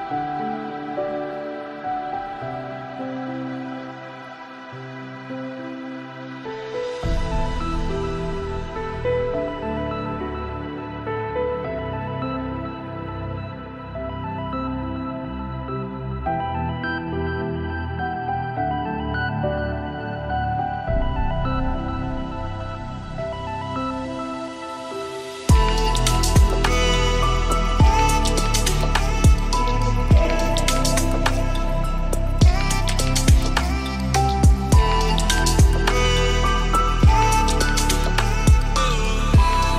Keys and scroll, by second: 18.8 ctrl+space, 34.8 ctrl+space.